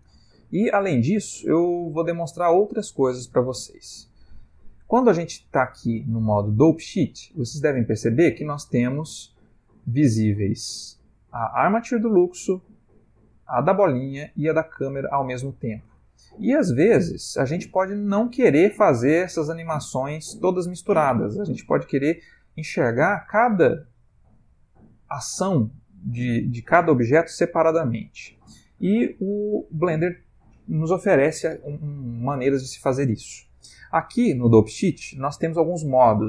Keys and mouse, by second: 1.8 click, 3.5 Escape, 6.4 click, 8.5 click, 12.9 click, 14.5 click, 16.0 click.